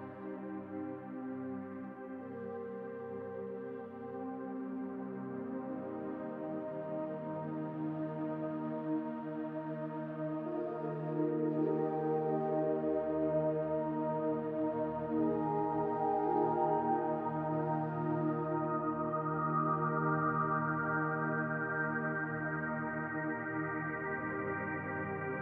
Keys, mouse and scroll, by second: 0.0 click, 7.4 middle click, 13.6-16.8 scroll down 2, 19.0 click, 20.1 click, 21.2 click, 22.1-22.5 scroll down 1, 22.5 middle click, 23.4-24.0 scroll up 3, 24.0 shift+middle click, 24.9-25.4 scroll up 3.